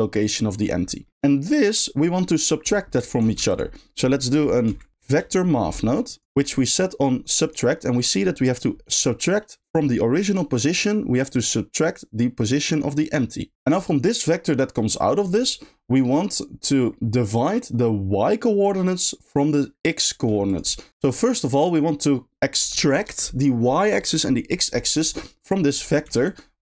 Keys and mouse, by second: 1.1 g, 3.2 shift+a, 9.4 click, 11.1 click, 11.3-12.7 drag, 13.4 click, 14.1 click, 14.3 click, 26.3 click.